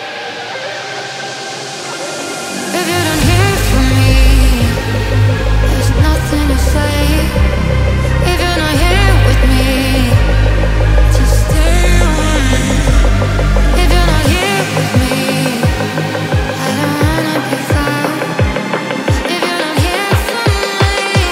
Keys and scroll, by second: 0.1 ctrl+z, 19.4 KP_0, 19.6 KP_Decimal, 20.3 KP_7, 21.2 KP_9.